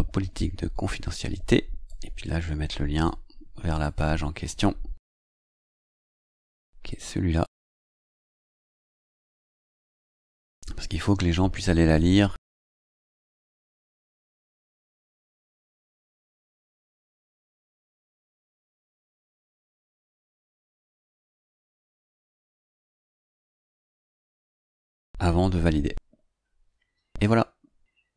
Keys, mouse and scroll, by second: 1.8-3.2 drag, 3.7 click, 6.8 click, 7.4 click, 8.5 ctrl+c, 9.3 click, 10.0 click, 11.0 ctrl+v, 14.8 click, 21.7 click, 22.8 click.